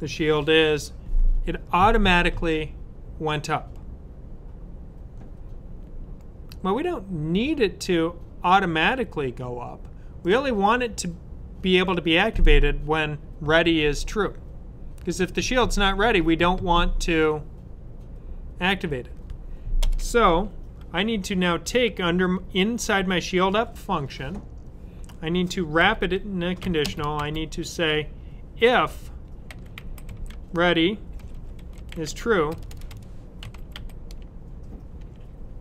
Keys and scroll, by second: 25.8-27.1 typing, 29.2-35.6 typing.